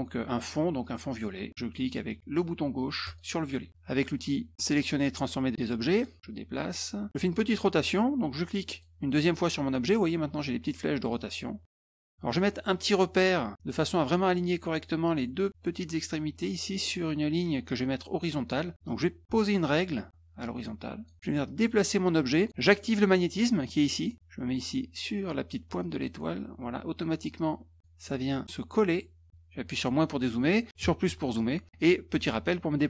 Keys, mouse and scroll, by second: 3.0 click, 5.9 click, 6.3-7.1 drag, 8.7 click, 11.1-12.3 drag, 18.8-21.0 drag, 21.4-22.5 drag, 25.8-27.8 drag, 28.0 middle click, 28.3 middle click, 28.4 scroll up 1, 28.7-29.3 drag.